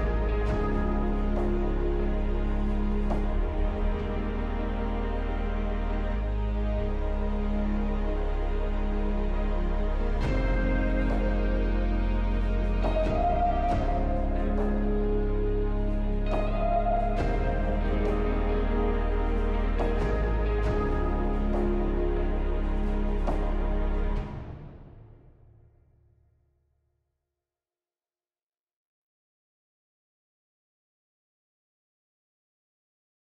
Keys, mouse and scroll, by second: 1.8-4.6 scroll down 2, 13.3 right click.